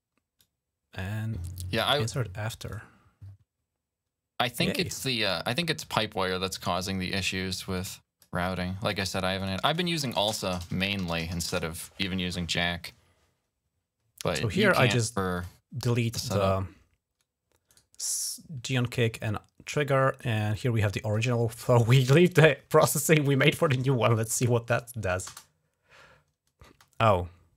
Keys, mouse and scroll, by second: 0.2-1.6 drag, 2.5 click, 4.3 click, 6.6 click, 7.5 click, 8.2 click, 9.2 click, 10.0-11.8 typing, 14.3 right click, 15.2 click, 17.5 right click, 18.5 click, 20.3 click, 25.1 space, 26.5 space.